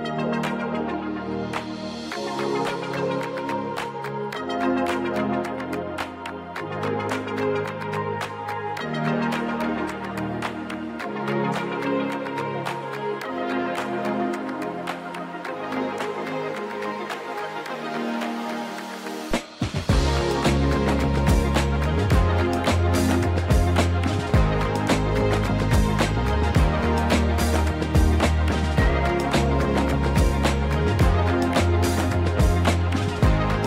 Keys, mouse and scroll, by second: 0.6 d, 1.8 s, 3.9 click, 4.4 g, 9.6 click, 9.9 s, 11.0 click, 11.1 g, 12.0 click, 13.1 KP_1, 14.1 g, 14.2 y, 14.6 x, 15.8 click, 17.6 s, 18.0 x, 19.4 click, 19.6 g, 19.7 y, 19.9 x, 21.1 click, 22.0 KP_3, 23.8 right click, 24.8 shift+d, 26.7 click, 28.1 shift+d, 29.6 click, 29.9 s, 31.4 click, 32.5 KP_1, 33.3-33.6 scroll up 1.